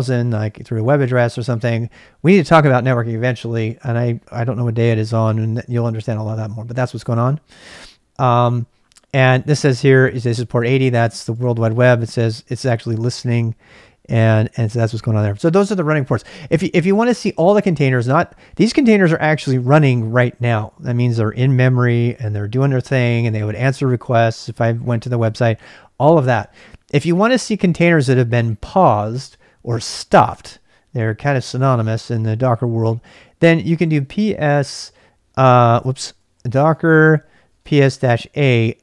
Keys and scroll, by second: 33.3-34.4 typing, 35.5-38.4 typing.